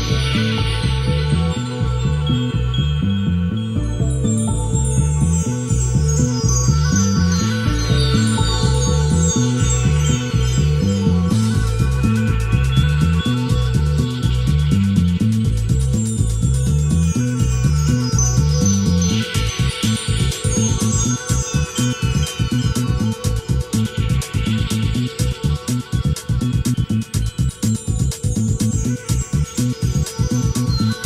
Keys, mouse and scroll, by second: 0.2 F12, 4.1 shift+F3, 6.3 click, 7.4 click, 8.2 click, 9.7 ctrl+shift+click, 10.4-11.6 ctrl+shift+drag, 11.8 ctrl+shift+click, 12.6 g, 13.2 ctrl+shift+click, 13.5 b, 13.8 ctrl+shift+click, 14.3 g, 14.9 ctrl+shift+click, 16.2 n, 17.6-18.5 ctrl+shift+drag, 19.2 d, 20.4 shift+click, 21.0-21.9 shift+scroll up 3, 22.1-22.7 shift+middle drag, 22.7 scroll up 2, 23.5 click, 24.4 click, 25.0-25.7 scroll down 4, 25.9-26.9 shift+middle drag, 27.4 shift+a, 29.8 click, 30.4 click, 30.8-31.0 scroll up 2.